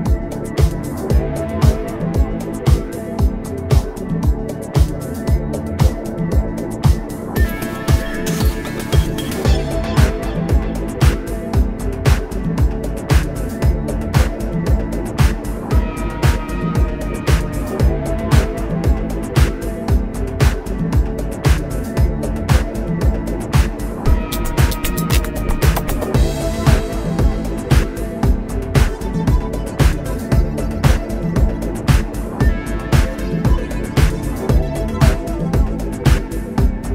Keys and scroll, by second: 3.4 space, 6.6 ctrl+z, 7.9 ctrl+z, 8.2 space, 14.4 a, 15.3 ctrl+j, 15.7 space, 16.8 ctrl+j, 18.6 ctrl+s, 21.2 ctrl+c, 21.9 ctrl+f, 23.8 ctrl+f, 25.4 ctrl+f, 26.7 ctrl+c, 27.2 ctrl+f, 29.2 space.